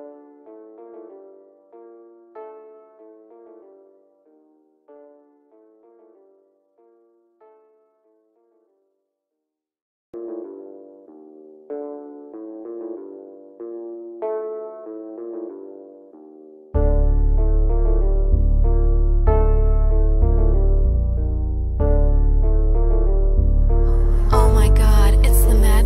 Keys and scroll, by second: 2.9 shift+F2, 3.1 F3, 12.8 ctrl+r, 16.8 shift+F2, 17.3 Escape, 19.6 Caps_Lock, 19.8 a.